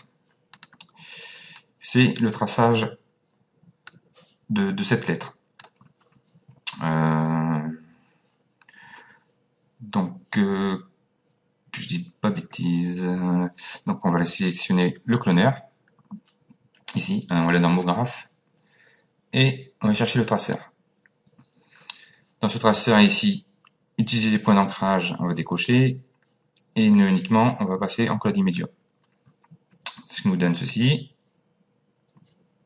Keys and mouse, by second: 0.6 click, 5.1 click, 15.1 click, 17.8 click, 25.6 click, 27.0 click, 30.6 click.